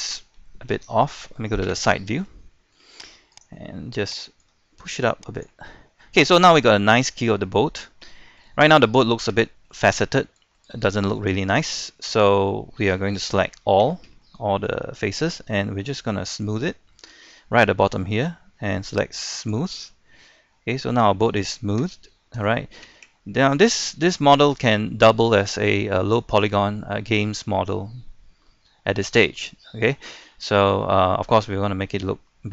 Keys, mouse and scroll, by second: 0.7-1.2 shift+scroll down 1, 1.6 KP_3, 2.5 shift+middle click, 3.3 right click, 4.4 click, 5.9-6.2 scroll down 1, 6.2 middle click, 6.6-7.4 scroll up 2, 7.4 middle click, 8.2 shift+middle click, 9.2 scroll down 1, 9.5 shift+middle click, 10.9 shift+middle click, 11.3-11.9 scroll up 1, 12.3-13.5 middle drag, 13.5 a, 14.2 shift+middle click, 19.4 click, 20.2 middle click, 21.0-21.3 scroll down 1, 21.3 middle click, 21.8 Tab, 22.1 middle click, 22.4 Tab, 23.1 Caps_Lock, 24.2 middle click, 25.2-25.6 shift+scroll, 26.3-30.1 shift+middle drag, 30.1-30.8 scroll up 2, 30.8-32.5 middle drag.